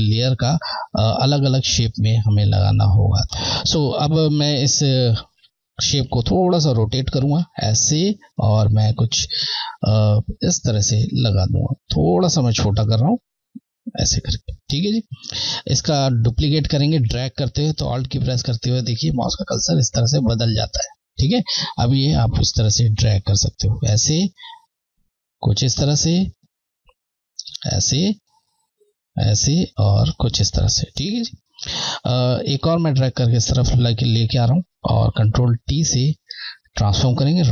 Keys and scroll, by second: 6.7 shift+Left, 11.5 shift+Left, 22.0 Left, 24.5 Left, 29.3 typing, 29.5 Left, 32.9 Left, 35.5 ctrl+t, 36.2 Caps_Lock, 37.1 Right.